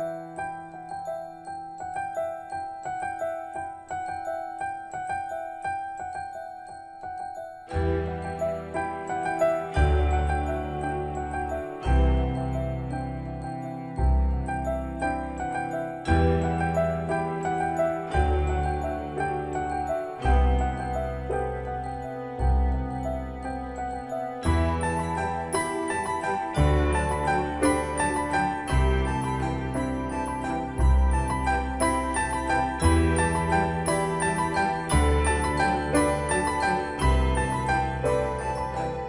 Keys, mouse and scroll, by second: 1.9-2.3 scroll up 1, 3.5-9.0 drag, 10.5 Escape, 11.5 click, 15.4 scroll down 1, 17.1 click, 22.4 scroll up 1, 23.5 shift+middle click, 26.2 scroll up 1, 27.3-27.8 scroll down 1, 28.4 click, 31.0 scroll up 1, 31.9-34.6 typing, 35.3 scroll up 1, 37.9 click, 38.4-38.8 scroll down 1.